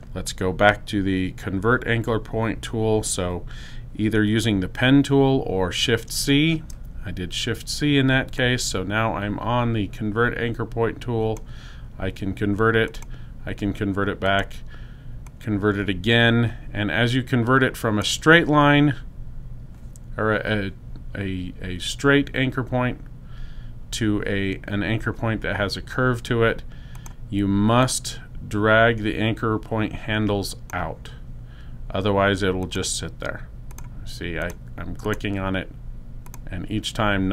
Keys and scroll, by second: 3.9 shift+c.